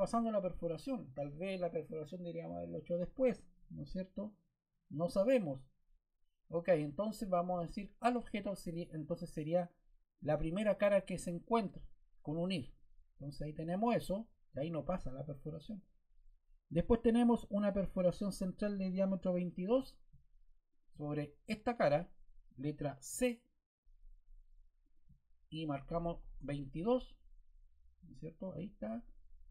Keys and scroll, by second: 23.0 c, 25.9 2, 26.2 Return.